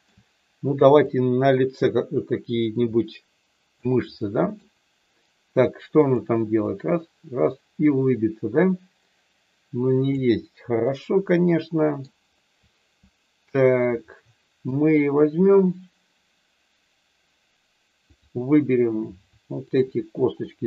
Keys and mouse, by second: 1.1-3.7 drag, 4.3 middle click, 6.0 click, 6.7-10.3 drag, 10.9-12.0 middle drag, 14.0 middle click, 19.6 shift+click.